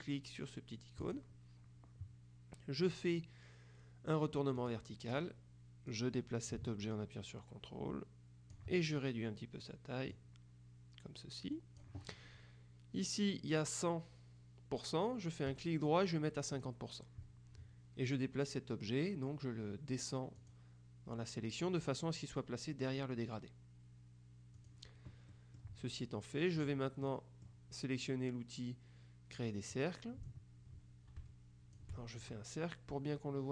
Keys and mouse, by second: 1.1 click, 4.7 click, 5.9-9.1 drag, 10.2-12.4 drag, 15.7 right click, 16.7 click, 20.5 click, 24.7 click, 25.4 middle click, 26.7 click, 27.1 middle click, 30.3-32.3 ctrl+drag.